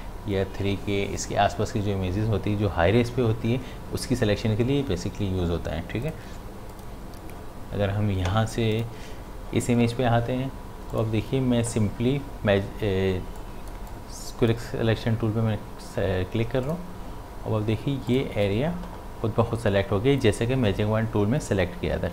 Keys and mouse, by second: 6.0 click, 10.9 click, 13.4-16.6 drag, 16.6 click.